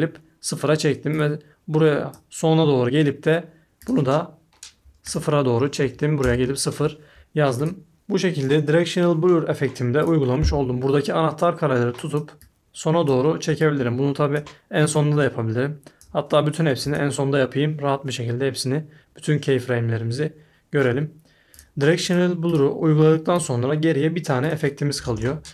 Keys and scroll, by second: 5.8 0, 6.2 Return, 25.0 super+a, 25.1 BackSpace.